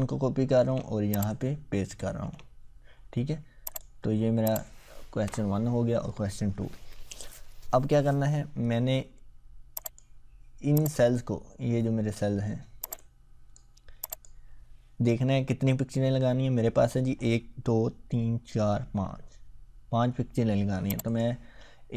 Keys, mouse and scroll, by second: 1.3 click, 2.2 ctrl+v, 3.7 click, 5.1 BackSpace, 9.8-12.3 drag, 21.0 click.